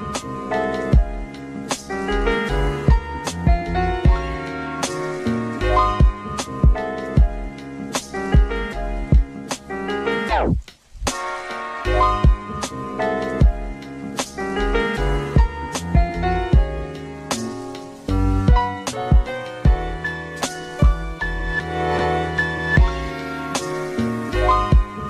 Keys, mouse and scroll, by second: 1.8 click, 3.0-3.4 scroll up 2, 3.7 shift+a, 6.7 s, 7.5 g, 8.8 s, 9.5 g, 10.3 s, 11.1 g, 11.8-13.0 scroll up 5, 13.0 Tab, 13.7 alt+z, 14.5 click, 15.3 s, 17.0 g, 18.2 click, 18.8 g, 20.0 click, 20.2 g, 21.6 click, 21.9 g, 22.8 click, 23.1 e, 24.0 click, 24.4 g.